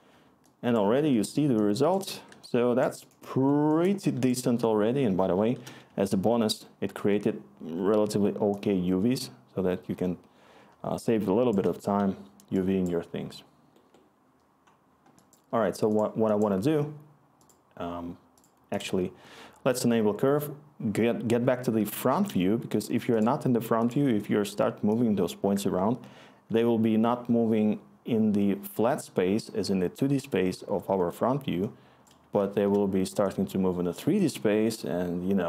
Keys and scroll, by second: 1.2-2.6 typing, 4.9-8.0 typing, 20.7 scroll, 21.7-26.4 3, 32.4 1, 34.5 scroll.